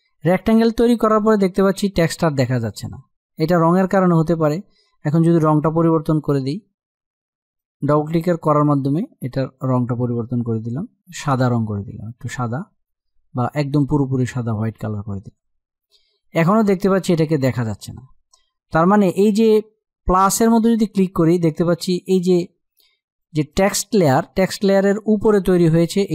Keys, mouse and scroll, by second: 7.1-14.1 drag, 19.9 click.